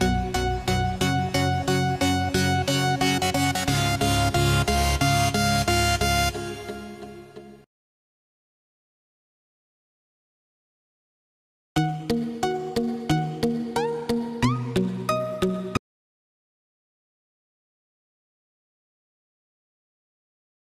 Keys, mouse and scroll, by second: 12.4 right click, 12.8 click, 14.8 right click, 15.5 click.